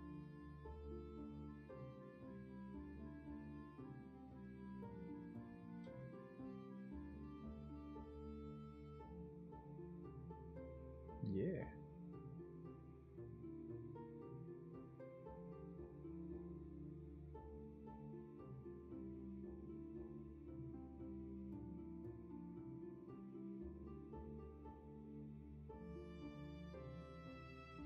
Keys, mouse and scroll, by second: 10.3 w, 13.2 w.